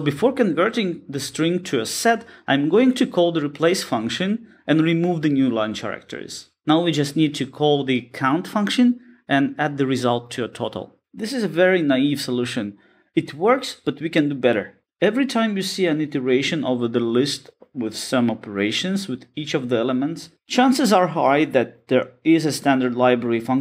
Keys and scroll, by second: 6.0 Return.